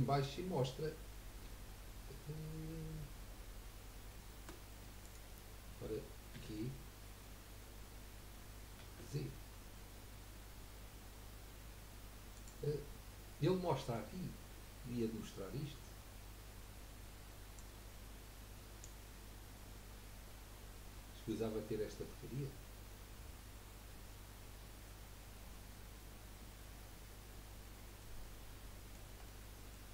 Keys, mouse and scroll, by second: 6.3 g, 17.6-20.7 drag, 28.0-29.9 middle drag.